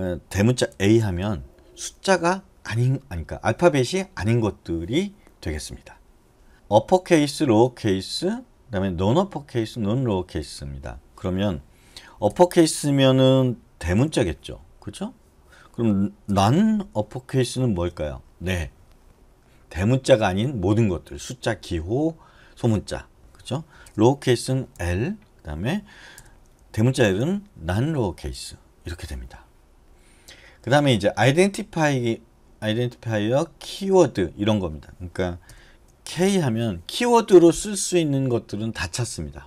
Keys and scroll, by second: 0.9 shift+a, 12.5 BackSpace, 14.2 u, 16.5 BackSpace, 17.8 shift+u, 24.0 BackSpace, 24.9 l, 27.1 shift+l, 35.7 BackSpace, 36.3 k.